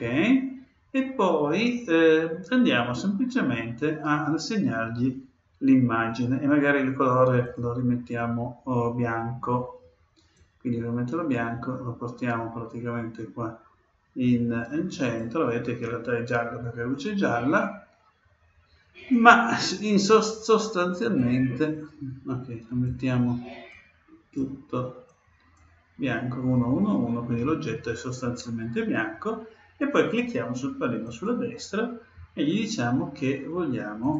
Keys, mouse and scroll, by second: 7.4-9.2 drag, 19.1-20.9 drag, 31.0-32.8 drag, 34.0-34.1 drag.